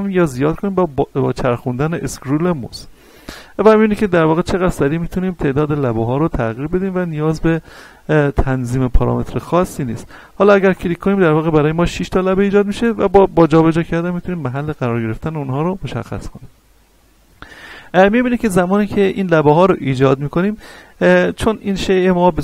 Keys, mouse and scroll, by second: 0.2-0.6 scroll down 1, 0.8-1.3 scroll up 1, 1.3-1.8 scroll down 1, 1.8 scroll up 1, 2.4-3.6 scroll down 1, 3.6-4.6 scroll up 1, 5.2-6.4 scroll down 1, 6.7-7.2 scroll up 1, 9.2-9.8 scroll down 1, 9.8-10.7 scroll up 1, 10.7 click, 16.3 right click, 17.0 scroll up 1, 17.5-19.3 scroll down 1.